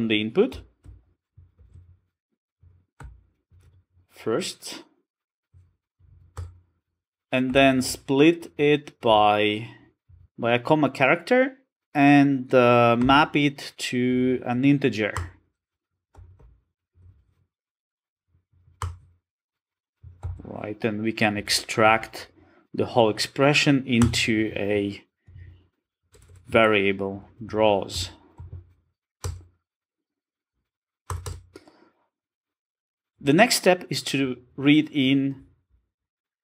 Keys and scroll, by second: 2.3 ctrl+space, 2.7 Return, 15.7 Return, 20.1 Return, 21.9 alt+super+v.